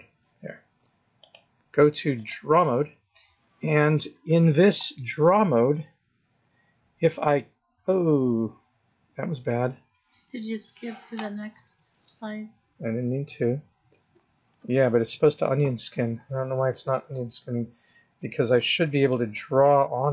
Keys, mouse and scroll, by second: 1.2 click, 7.0 click, 7.3 click, 12.5 Left, 14.9 Right, 15.8 Left, 19.0 click.